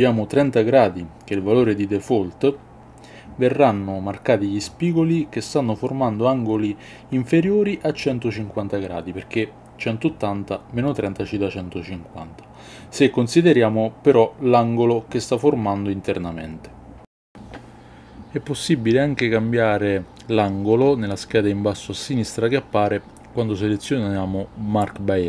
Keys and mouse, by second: 1.8 KP_1, 2.8 click, 3.7-4.9 drag, 5.1 middle click, 5.6 a, 6.2 click, 7.0-8.2 drag, 8.2 KP_2, 8.3 KP_1, 8.7 middle click, 11.1 click, 12.5 click, 13.4 click, 14.6 middle click, 15.4 click, 16.1 middle click, 16.7 shift+middle click, 17.0-25.2 middle drag.